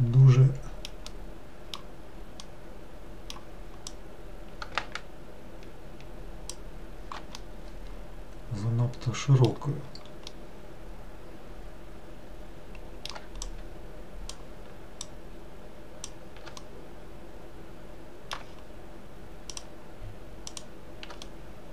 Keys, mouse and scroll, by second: 3.9 click, 7.4-13.4 middle drag, 13.5 shift+click, 15.2 shift+click, 16.7-19.6 middle drag, 19.6 shift+click, 20.6 shift+click, 21.3-21.7 middle drag.